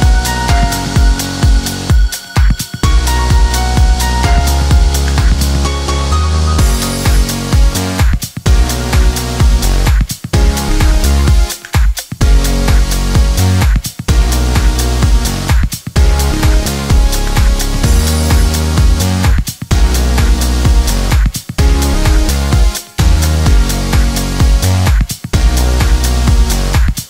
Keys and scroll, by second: 22.2 4, 22.7 Tab, 24.7 2, 24.8 0.